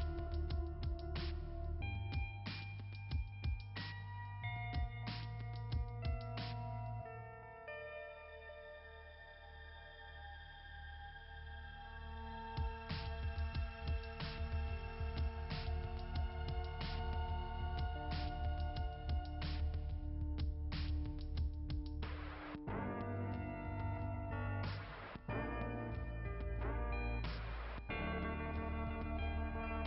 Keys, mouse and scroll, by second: 0.0 click, 0.9 click, 1.3 click, 3.5 click, 7.2-12.8 typing, 15.9 ], 16.2 ], 17.2 ], 18.1 click, 18.4 click, 27.5 click, 29.5 click, 29.7 click.